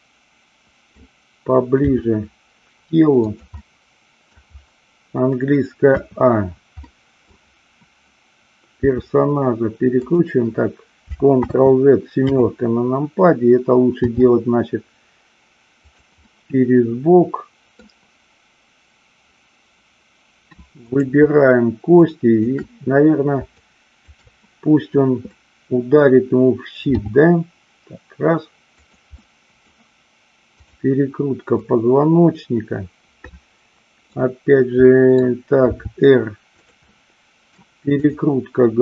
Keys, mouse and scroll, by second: 1.9 g, 3.3 click, 3.5 middle click, 5.8 a, 6.8 middle click, 8.8 r, 10.0 click, 11.4 ctrl+z, 12.3 KP_7, 14.2 r, 16.2-17.9 middle drag, 20.8-22.3 drag, 22.4 shift+click, 23.5-24.2 shift+drag, 25.3 middle click, 26.9 g, 28.8 click, 29.2-29.6 middle drag, 30.5-31.9 drag, 32.0-34.2 middle drag, 34.8-35.2 middle drag, 35.6 r, 36.8 middle click, 37.9-38.8 drag.